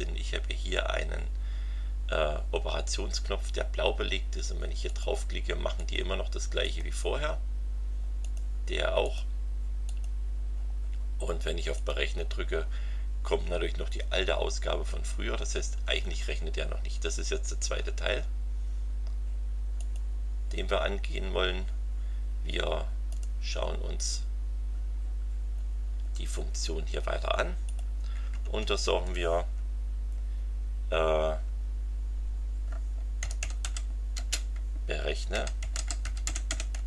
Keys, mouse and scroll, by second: 4.8 click, 5.8 click, 6.6 click, 8.2 click, 9.0 click, 9.8 click, 11.7 click, 19.8 click, 23.1 right click, 24.0 click, 25.8-26.9 scroll down 3, 27.6 click, 28.4 Return, 31.4 Tab, 32.9-36.8 typing.